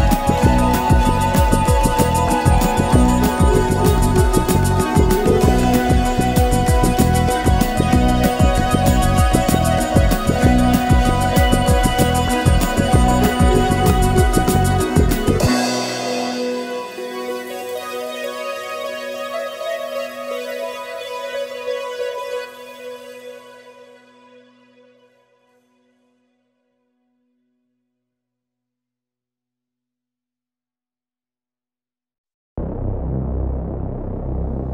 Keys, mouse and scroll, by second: 0.2 shift+click, 0.5 shift+middle click, 0.8 g, 1.2 middle click, 1.5-2.0 scroll up 2, 1.6 a, 1.8 l, 1.9 middle click, 2.0 g, 2.5-3.6 shift+middle drag, 3.6 alt+click, 3.7 scroll down 3, 3.8 shift+middle click, 4.2 s, 4.4 middle click, 4.6 scroll up 1, 4.7 g, 5.4 middle click, 5.5 Tab, 5.6-6.4 middle drag, 6.4 click, 6.7 middle drag, 6.9 scroll up 2, 7.0 middle click, 7.4 1, 7.6 middle click, 7.7 g, 8.4 click, 8.5 g, 9.9 middle click, 10.1 Tab, 10.2 middle click, 10.3 click, 10.5-12.6 typing, 11.0 shift+click, 11.2 shift+click, 11.9 click, 12.0 click, 12.2 middle click, 13.0 middle drag, 13.2 click, 13.7-17.1 typing, 14.0 shift+middle click, 14.8 middle click, 15.5 middle click, 15.9 scroll up 1, 16.3 click, 16.8 click, 17.6 scroll down 4, 17.7 Tab, 17.8 shift+middle drag, 18.0 scroll up 2, 18.1 middle drag, 18.3 click, 18.8-20.6 typing, 19.5 click, 20.0-20.5 middle drag, 20.5 shift+click, 20.5 middle click, 21.4-22.1 middle drag, 22.6 KP_1, 22.8 g, 23.3 Tab, 23.4 scroll down 3, 23.4 shift+middle click, 24.4 shift+middle click, 24.6 KP_1, 24.9-25.4 scroll up 2, 25.0 Tab, 25.1 shift+middle click, 25.4 2, 25.6 scroll down 1, 25.6 middle click, 25.8 alt+shift+Left, 26.5 shift+Left, 26.6 shift+Left, 26.9 shift+Left, 27.0 middle click, 27.8 s, 28.1 middle click, 28.3-29.7 scroll up 9, 28.8 shift+middle click, 29.7 g, 29.8 scroll down 10, 30.0 middle drag, 30.3 KP_Decimal, 30.3 KP_1, 30.5 scroll up 2, 30.6 Tab, 31.3 ctrl+e, 31.4 shift+middle click, 31.5 scroll up 1, 31.7 alt+click, 31.9 scroll down 3, 32.0 shift+middle click, 32.1 scroll up 1, 32.3 alt+shift+click, 32.6 ctrl+e, 32.7 middle click, 33.1 click, 33.3 shift+middle click, 33.9 s, 34.6 g.